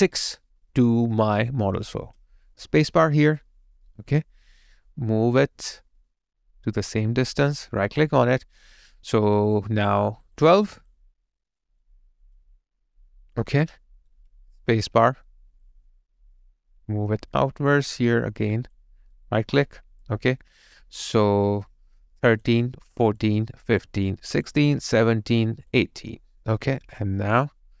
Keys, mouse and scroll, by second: 2.0 space, 7.9 right click, 10.5 double click, 13.6 alt+right click, 14.6 space.